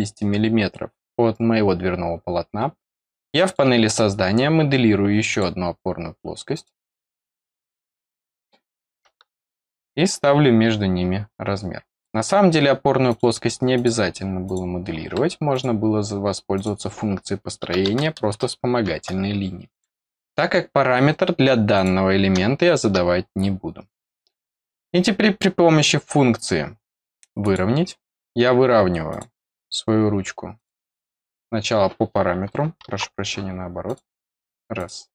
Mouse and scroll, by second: 3.4 click, 5.2 click, 6.5 click, 7.8 click, 11.9 click, 13.0 click, 13.7 click, 14.4 click, 15.5 click, 16.5 click, 19.7 click, 20.4-21.0 scroll up 1, 21.7 click, 24.0 click, 27.4 click, 29.0 click, 30.5 click, 33.8 click, 34.7 click.